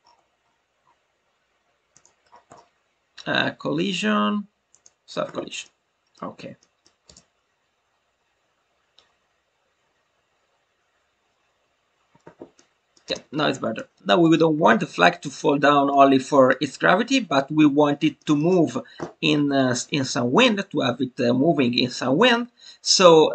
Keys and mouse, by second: 4.6 click, 5.6-6.1 middle drag, 6.8 middle click, 12.5-12.9 middle drag, 13.7 click, 14.0 middle click, 15.8-16.5 middle drag, 18.1 alt+middle click, 18.3 alt+middle click.